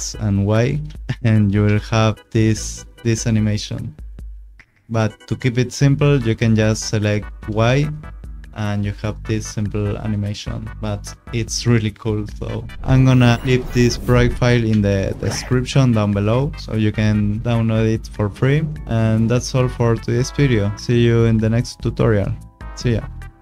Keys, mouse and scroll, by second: 0.0 click, 0.7 s, 1.6 space, 7.3 space.